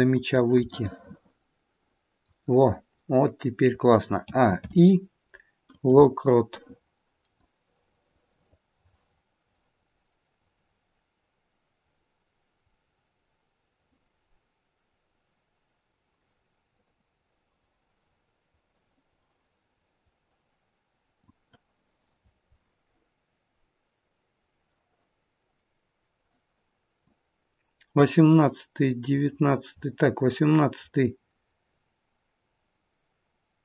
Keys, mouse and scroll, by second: 0.7 middle click, 4.2 a, 4.5 i, 23.2-24.1 scroll down 1, 27.1 click.